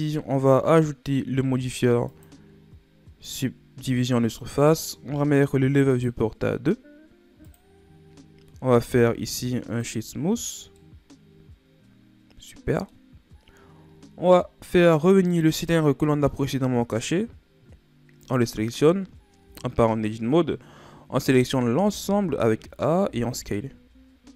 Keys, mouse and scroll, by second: 2.0-5.0 drag, 5.8-8.6 drag, 8.6 w, 10.7-13.8 middle drag, 15.2 click, 18.1 click, 19.4 Tab, 21.0 a, 21.4 a, 21.7 a, 22.9 s.